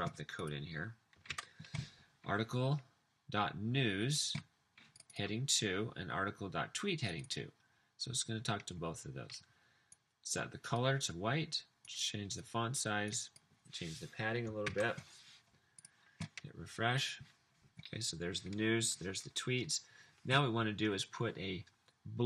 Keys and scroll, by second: 1.4 super+v, 14.7 super+s.